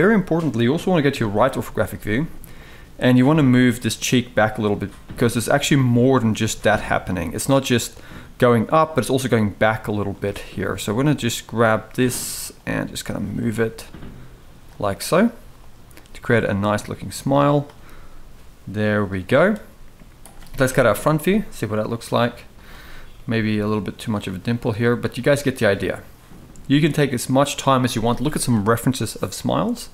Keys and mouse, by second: 0.9 KP_3, 2.3 drag, 3.2 g, 4.8 click, 5.0 g, 6.0 click, 6.1 g, 7.5 click, 10.0 g, 11.9 g, 13.0 click, 13.2 g, 15.0 g, 15.7 click, 15.9 g, 19.2 g, 20.4 KP_1, 22.3 click, 22.9 g, 24.7 click, 25.0 g, 26.2 g.